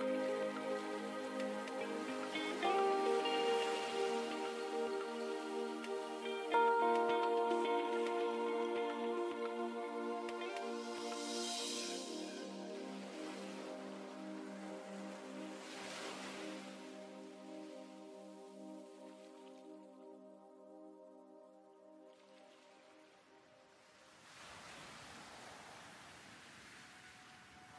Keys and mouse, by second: 0.2 ctrl+Tab, 1.9 s, 4.2-6.0 middle drag, 6.0 e, 6.8-9.2 drag, 8.3 KP_1, 9.4 middle click, 11.8 z, 13.3 e, 15.0 click, 15.9 s, 17.7 e, 18.6 s, 21.1-23.5 drag, 22.2 z, 23.7 e, 24.6 s, 26.1 f, 27.5-27.7 drag.